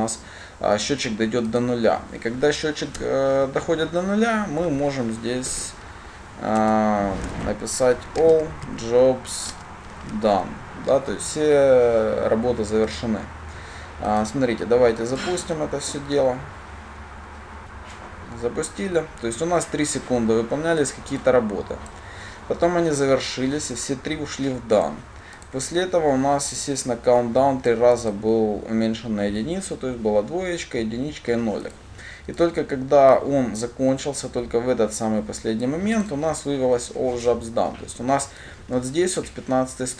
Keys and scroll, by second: 7.6 Return, 15.5 ctrl+shift+F10.